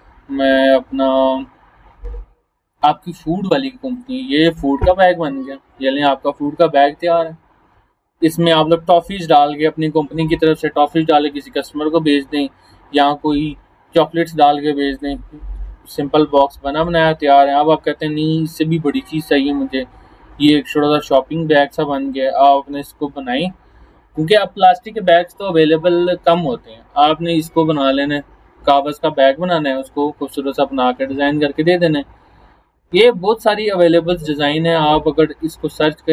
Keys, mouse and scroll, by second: 2.6 scroll up 1, 3.9 click, 14.9 click, 16.5 scroll down 1, 20.5 click, 29.8 click, 30.5 scroll down 1, 31.3 scroll up 1, 34.9 scroll up 1.